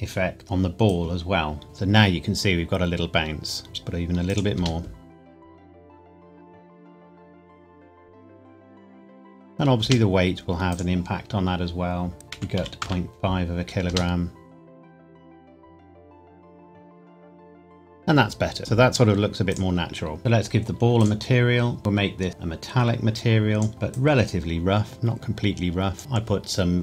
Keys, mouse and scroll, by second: 1.1 click, 1.6 space, 3.6 click, 4.5 space, 9.8 space, 10.7 click, 12.3 KP_Decimal, 12.5 KP_5, 12.8 KP_Enter, 13.9 space, 18.6 space, 19.5 click, 21.8-22.3 scroll down 1, 22.3 click.